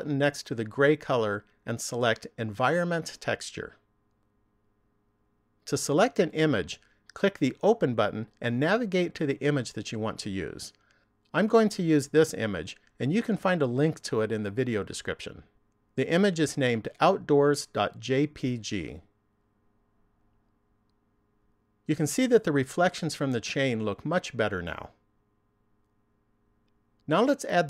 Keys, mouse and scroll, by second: 0.9 click, 8.0 click, 19.2 click.